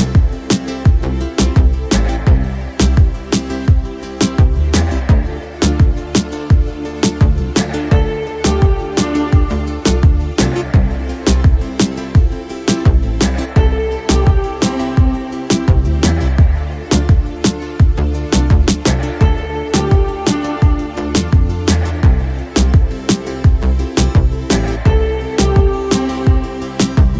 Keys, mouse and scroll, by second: 1.4 shift+drag, 1.9 shift+click, 2.3 shift+drag, 2.6-5.4 middle drag, 6.2 shift+drag, 6.5 middle click, 7.2 z, 8.2-9.4 middle drag, 9.9 KP_5, 10.5-14.3 middle drag, 15.5-16.2 middle drag, 16.7-18.6 middle drag, 19.3 shift+middle drag, 19.6 middle drag, 20.2 z, 21.6-22.5 middle drag, 22.8 shift+middle drag, 23.8-27.1 middle drag.